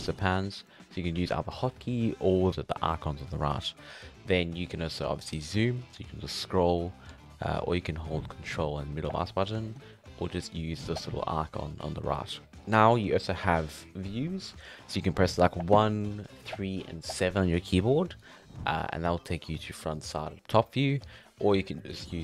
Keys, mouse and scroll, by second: 0.0-2.5 drag, 5.3-5.8 scroll down 7, 5.8-6.2 scroll up 1, 6.2-6.7 scroll down 8, 6.7-7.2 scroll up 4, 7.2-10.9 ctrl+middle drag, 10.9-15.5 ctrl+drag, 18.4 click, 19.3-22.2 middle drag.